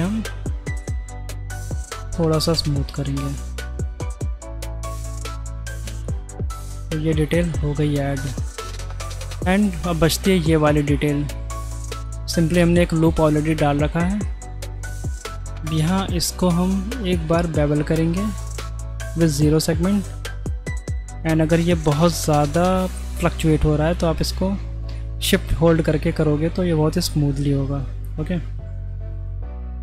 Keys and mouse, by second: 0.5 ctrl+b, 5.1 middle click, 5.9 Tab, 6.6-8.9 middle drag, 10.4 middle click, 12.0 click, 12.2 Tab, 12.9 2, 14.2-15.0 middle drag, 17.1 ctrl+b.